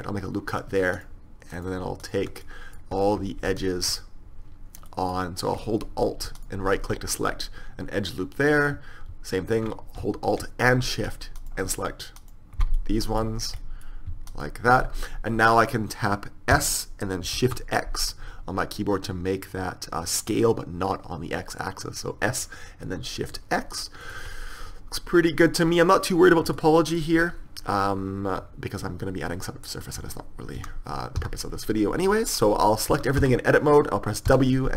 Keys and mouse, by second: 4.5-7.4 middle drag, 8.5 middle click, 8.8-10.2 middle drag, 11.5-13.3 right drag, 13.3-15.4 middle drag, 16.6 s, 24.4-25.5 middle drag, 30.8 a, 31.2 a, 33.0 a, 33.3 a, 34.3 w.